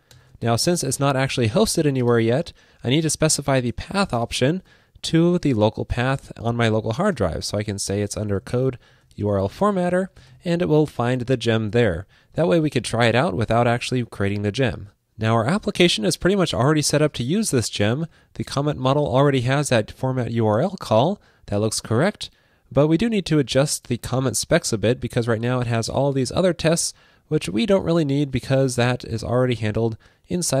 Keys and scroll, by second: 10.9 super+Right, 12.5 super+s.